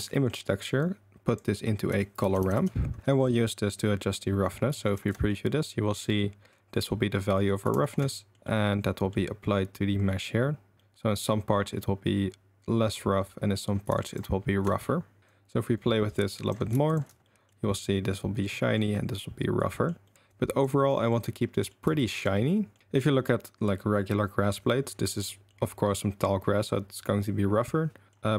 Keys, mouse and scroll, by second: 0.2 click, 0.8-3.0 drag, 4.9 ctrl+shift+click, 5.3-5.7 drag, 7.8 ctrl+shift+click, 8.1 drag, 8.5 click, 10.1 click, 10.8 click, 14.1 ctrl+shift+click, 15.2-16.5 drag, 16.8 ctrl+shift+click, 17.2 click, 18.6 middle click, 19.6 middle drag, 20.0 middle click, 20.3 click, 20.9 middle drag, 21.5 middle drag, 21.9 shift+middle drag, 22.3 middle click, 25.2-25.6 middle drag, 28.1 middle click.